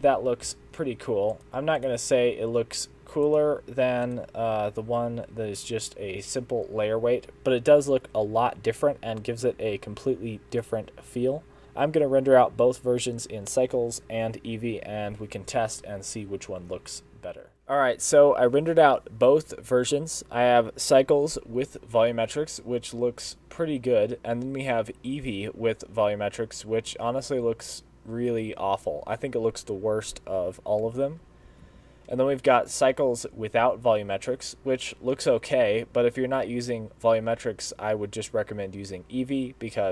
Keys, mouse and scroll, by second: 0.6 alt+a, 1.4 click, 1.9 click, 3.3 click, 4.1 click, 9.3 click.